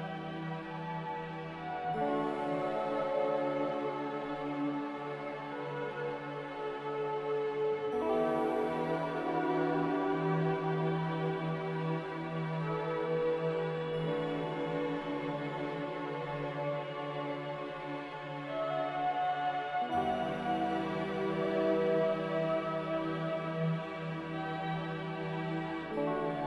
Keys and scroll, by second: 19.2 typing, 19.6 Return, 23.1 3, 23.1 0.